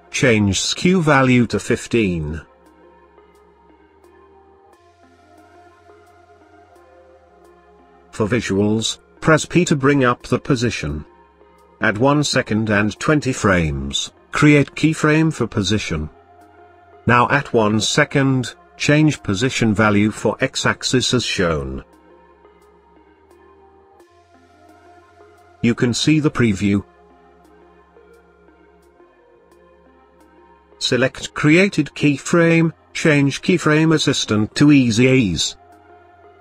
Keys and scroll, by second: 7.8 p.